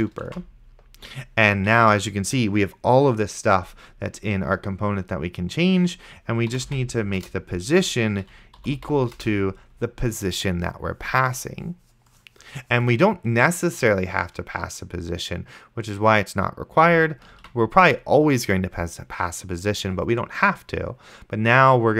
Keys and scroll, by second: 0.6 shift+9, 6.7 o, 7.2 Return, 8.4-9.3 typing, 17.6 ctrl+s.